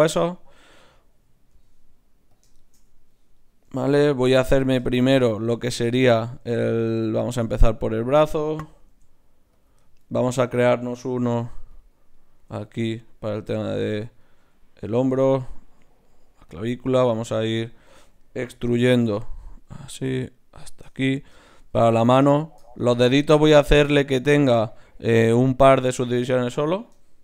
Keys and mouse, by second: 0.7-2.1 right drag, 1.6 g, 3.3-5.1 drag, 3.7 g, 6.1-8.1 drag, 6.4 g, 8.9 ctrl+alt+s, 11.1 g, 12.4 g, 13.3 right click, 13.7 click, 14.2-15.4 drag, 14.4 g, 15.4-17.9 right drag, 15.4 g, 16.5-18.6 drag, 17.9 ctrl+z, 18.6 e, 19.9 e, 21.0-24.8 middle drag, 21.6 e, 27.1-27.2 middle drag.